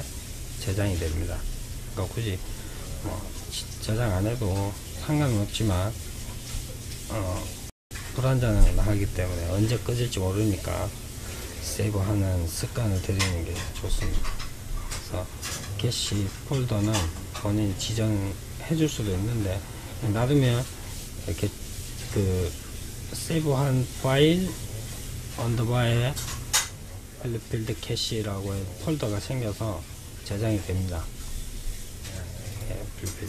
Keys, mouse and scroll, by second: 28.7-29.2 scroll down 2, 30.3-31.6 scroll down 2, 31.6 click, 32.5-33.2 scroll down 2.